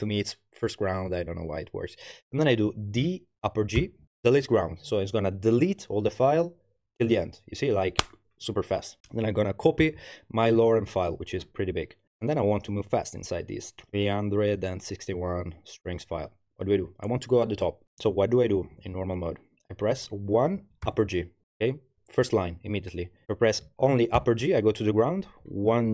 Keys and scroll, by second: 3.0 d, 3.8 shift+g, 9.8 super+v, 17.8 Up, 17.9 Up, 18.1 Up, 18.2 Up, 18.5 Down, 19.1 Down, 20.1 1, 20.9 shift+g, 24.2 shift+g, 25.4 1.